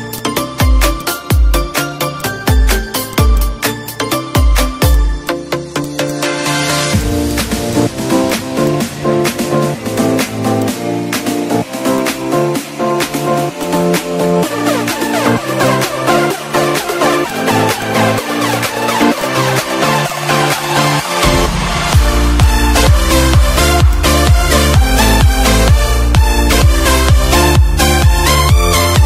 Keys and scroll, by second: 2.7 ctrl+shift+a, 3.9 Up, 5.5 Up, 6.3 ctrl+d, 16.7 ctrl+/, 18.7 ctrl+z, 19.6 ctrl+z, 20.4 -, 21.8 space, 27.7 -.